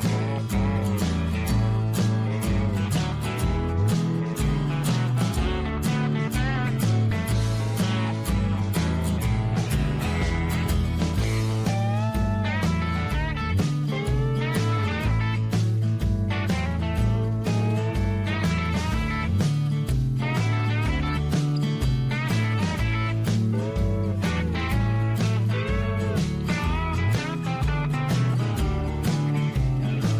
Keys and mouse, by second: 0.1 middle click, 2.1 ctrl+r, 5.7 shift+middle click, 7.2 shift+middle click, 10.9-12.6 drag, 13.0 click, 13.5 click, 15.0 click, 15.4-18.1 drag, 18.4 shift+middle click, 21.4 click, 21.6-23.8 drag, 24.7-26.5 drag, 28.5-30.1 drag.